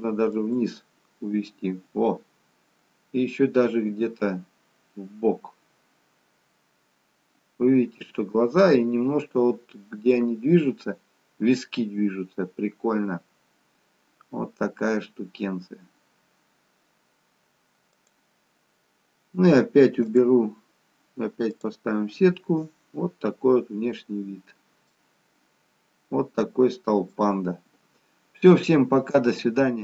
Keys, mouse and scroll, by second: 1.3-1.9 scroll down 1, 4.0 scroll down 2, 4.1 g, 20.2 click, 22.9 scroll down 1, 23.6-24.3 scroll down 1, 24.3-24.9 scroll down 3, 25.1 shift+middle click.